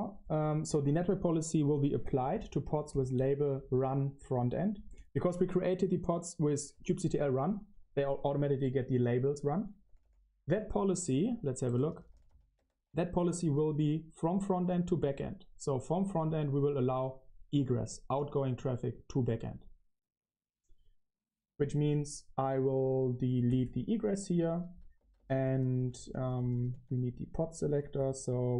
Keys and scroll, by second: 2.6 super+v, 2.6 i, 3.1 Escape, 6.4 Escape, 6.7-13.4 typing, 9.0 Escape, 15.9-16.6 typing, 23.3-28.5 typing.